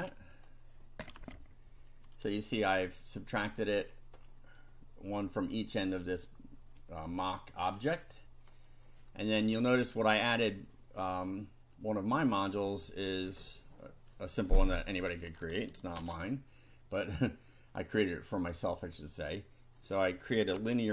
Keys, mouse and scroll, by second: 0.3 ctrl+click, 1.2 F5, 1.9 scroll down 2, 2.8-3.8 drag, 3.9-4.4 scroll down 2, 7.1-7.9 drag, 8.0 click, 12.1 click, 13.0 scroll down 2, 14.2-15.4 drag, 16.0 ctrl+c, 18.9 click, 19.8 click, 20.6 ctrl+v.